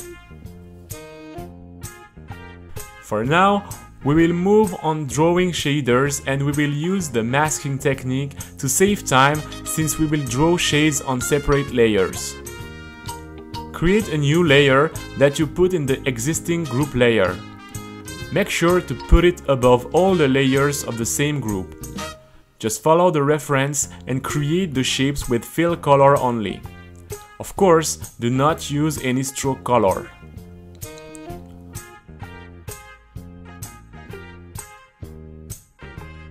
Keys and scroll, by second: 0.0-4.9 typing, 6.1 c, 12.5-18.5 typing, 20.8 a, 22.2-30.3 typing, 24.9 Return, 31.6-36.3 typing.